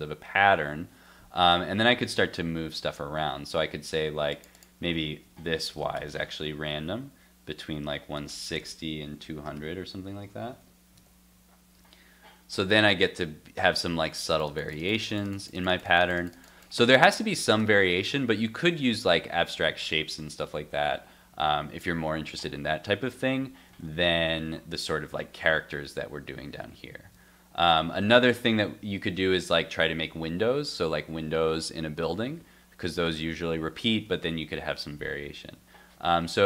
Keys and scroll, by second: 1.7 super+Tab, 10.1 super+s, 10.5 super+Tab, 11.0 super+r, 23.7 super+Tab, 24.4 super+s.